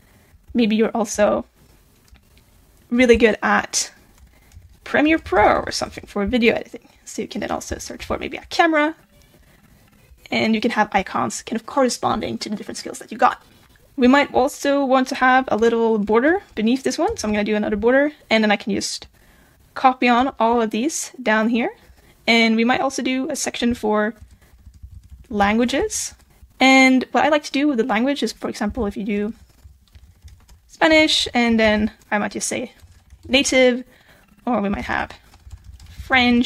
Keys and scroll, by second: 1.2 super+z, 29.6 super+b, 34.8 super+b.